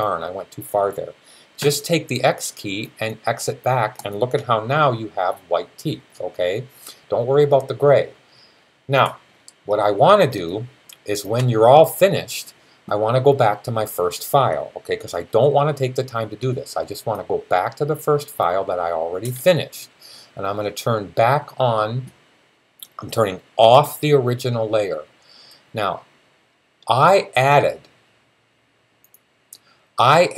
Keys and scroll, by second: 1.4 x, 4.2 x.